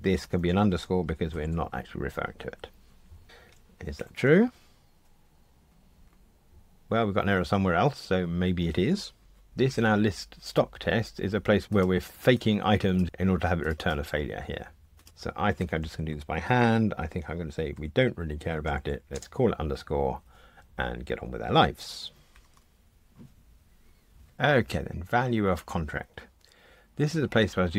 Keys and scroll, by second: 3.9 super+F9, 22.3 super+F9.